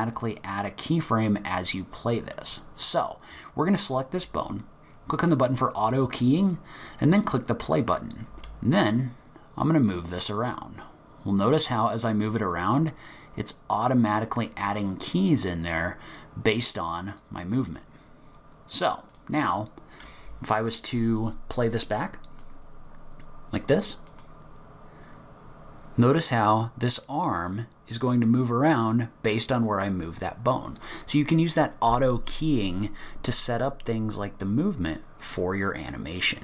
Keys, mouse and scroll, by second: 3.3 click, 5.2 click, 7.2 click, 19.1 click, 20.7 click, 24.1 click.